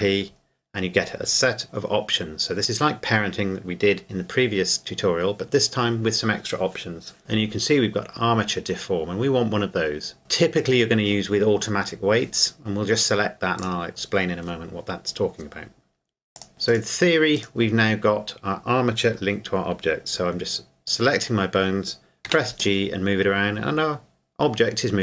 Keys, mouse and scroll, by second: 13.6 click, 16.3 click, 16.7 right click, 22.3 g.